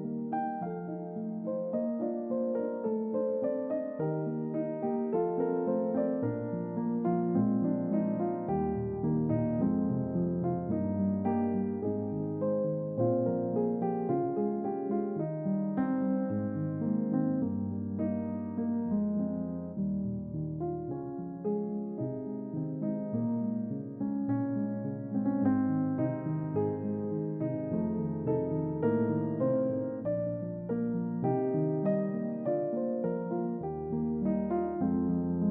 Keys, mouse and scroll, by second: 7.0 middle click, 7.0-7.3 scroll down 2, 8.4 click, 11.9 g, 13.1 click, 13.5 typing, 18.2 click, 19.7 click, 22.5 click, 23.8-24.4 typing, 24.7 click, 27.6 click, 30.1 click, 32.1 middle click, 32.1-32.5 scroll up 2, 32.9 scroll up 2.